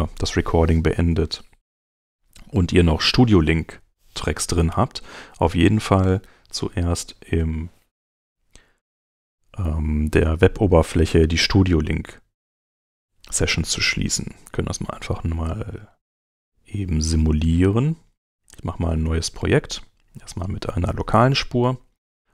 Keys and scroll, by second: 11.4 super+Tab.